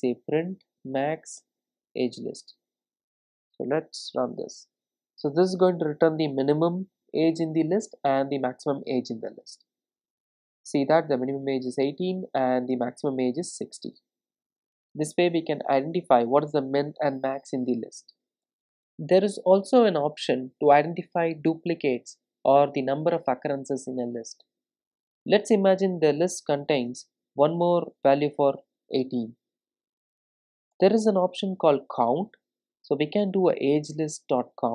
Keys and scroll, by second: 4.5 ctrl+r, 32.1 Return.